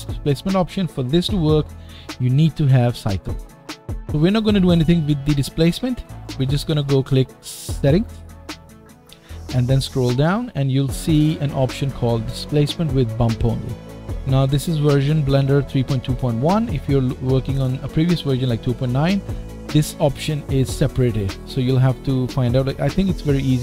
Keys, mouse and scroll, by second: 9.6-11.2 scroll down 4.